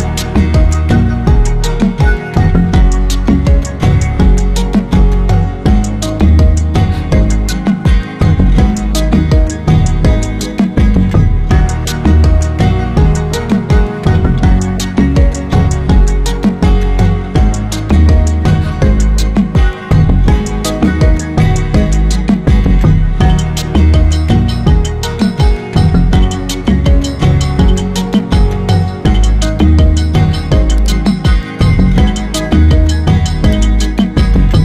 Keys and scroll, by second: 17.5 ctrl+j.